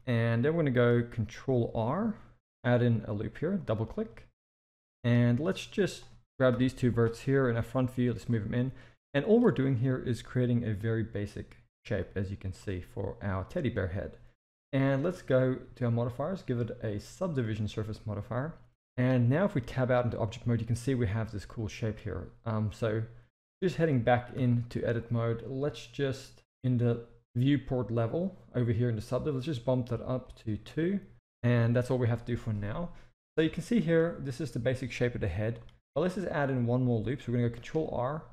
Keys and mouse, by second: 0.5 shift+middle drag, 2.4 ctrl+r, 4.0-5.0 middle drag, 5.6 click, 6.5 KP_1, 7.4 g, 9.0-9.3 drag, 9.8 g, 14.9-17.4 drag, 19.0-19.5 middle drag, 19.8 Tab, 20.2-21.7 middle drag, 23.5 Tab, 24.3 KP_1, 30.2 click, 33.5 shift+middle click, 35.3 shift+middle click, 37.6 ctrl+r.